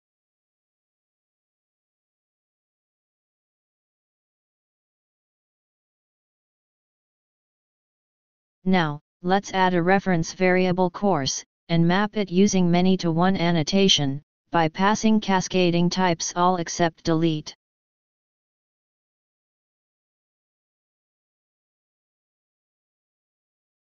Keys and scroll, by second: 4.6 ctrl+shift+o.